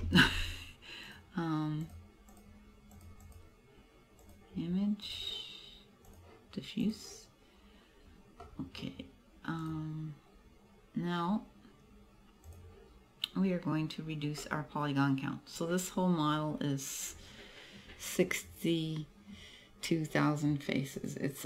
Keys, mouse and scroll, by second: 1.1 click, 1.9 click, 2.4 click, 3.3 click, 5.1 click, 7.1 click, 7.5 scroll up 2, 8.0 scroll down 2, 8.5 middle click, 9.7 right click, 12.5 click, 14.5 middle click, 15.1 middle click.